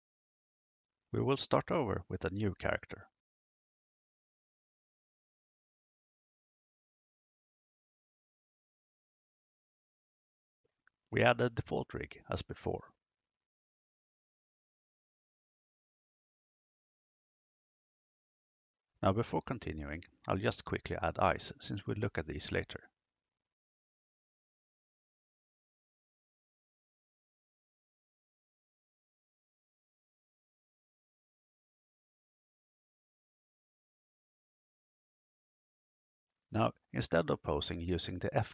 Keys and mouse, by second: 1.0 click, 2.7 click, 6.2 click, 10.0-11.0 drag, 12.7-14.6 drag, 17.1 click, 18.8 click, 20.0-20.9 drag, 22.3 click, 25.9 click, 30.9 click, 32.9 click, 35.0 click.